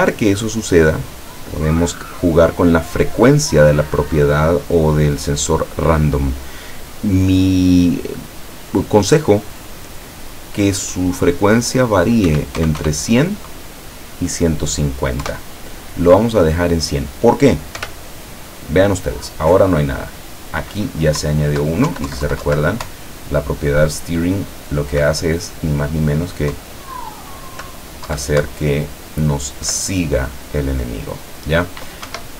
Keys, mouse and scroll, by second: 0.0 right click, 2.9 click, 12.3 KP_1, 12.6 KP_0, 15.3 KP_Enter, 17.9 p, 21.3 Down, 22.9 Up, 26.6 Down, 28.5 Up, 32.2 Escape.